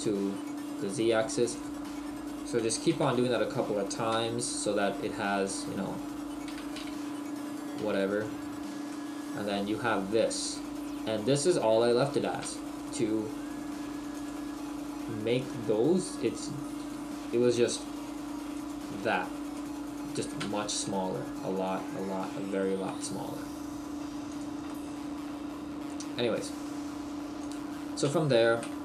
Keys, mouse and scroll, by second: 1.7 click, 2.7 e, 5.5 click, 6.5 e, 8.2 click, 8.9 middle click, 19.6 middle click, 20.6 scroll down 1, 20.8 a, 21.5 s, 22.9 s, 24.3 click, 24.7 middle click.